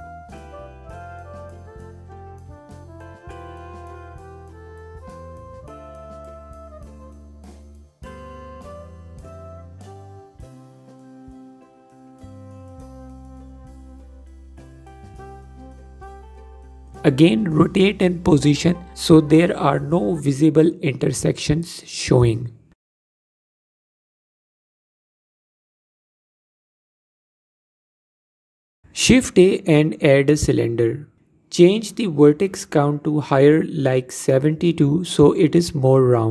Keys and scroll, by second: 6.3 alt+q, 8.7 alt+q, 10.9 alt+q, 12.8 alt+q, 15.0 alt+q, 16.2 Tab, 30.2 shift+a.